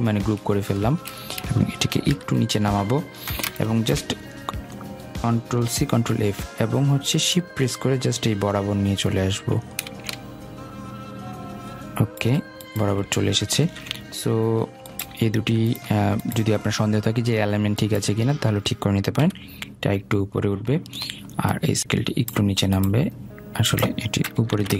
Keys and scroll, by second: 1.8 shift+Down, 5.5 ctrl+c, 5.7 ctrl+f, 19.0 shift+Up, 24.4 ctrl+shift+].